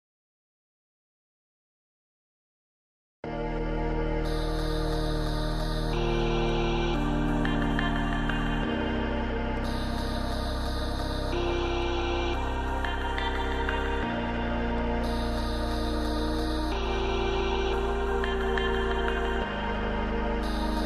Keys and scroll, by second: 7.6 ctrl+j, 12.5 ctrl+i.